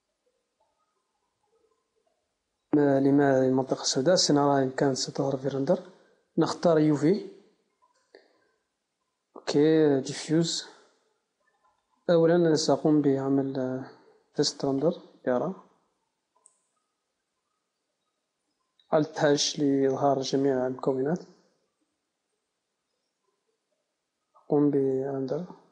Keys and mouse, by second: 0.7 click, 1.2 click, 1.5 click, 7.0-12.2 drag, 13.3 KP_0, 14.6 Tab, 22.5 z, 24.1 a, 25.1 click.